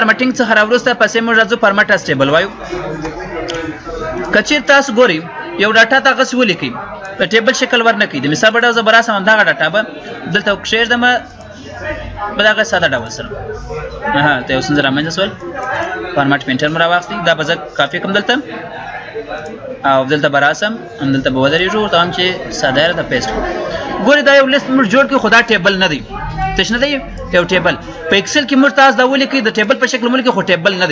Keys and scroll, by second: 7.1 ctrl+c.